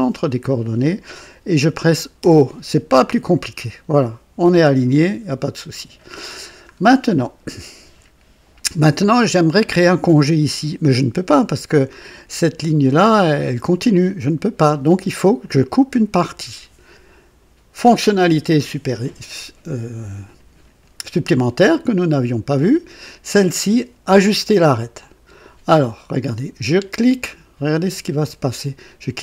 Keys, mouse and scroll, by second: 2.1 o, 4.9-5.4 scroll up 2, 5.4-6.1 right drag, 6.7 scroll down 1, 24.9 click.